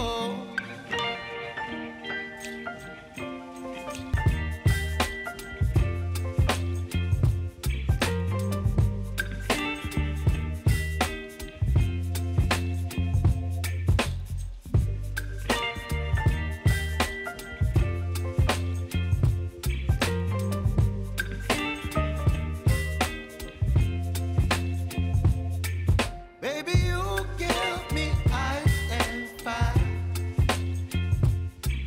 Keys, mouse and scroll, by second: 5.7 scroll down 1, 7.1-17.2 drag, 17.9 space, 20.3 scroll up 1, 21.2 click, 21.9 ctrl+c, 22.8 click, 24.6 ctrl+a, 25.4 ctrl+v, 26.9 click, 28.9 ctrl+z, 30.2 click, 31.4 ctrl+v.